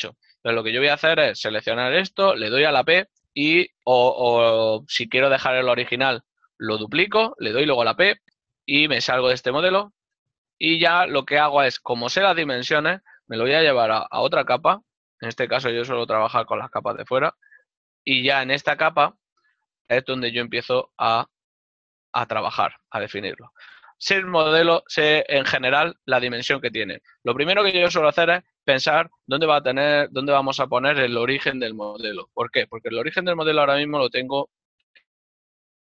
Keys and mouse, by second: 8.2 click, 11.2 g, 18.3 click.